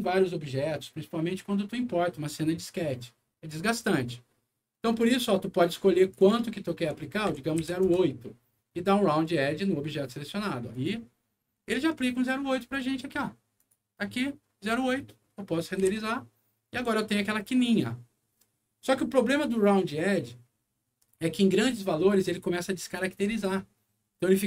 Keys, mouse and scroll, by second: 6.0 click, 6.1 click, 7.2 ., 7.6 8, 7.9 Return, 10.7 click, 12.9 middle click, 13.5 click, 15.0 middle click, 15.8 F9.